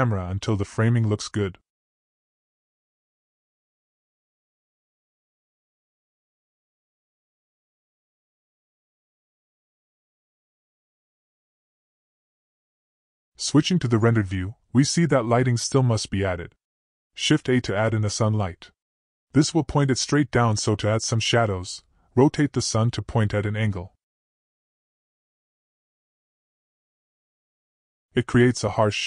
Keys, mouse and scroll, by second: 2.0 g, 5.4 r, 12.4 click, 14.7-15.4 middle drag, 16.9 shift+a, 20.0-20.3 middle drag, 20.3 r, 23.1 r, 25.1 r, 27.3-27.8 middle drag.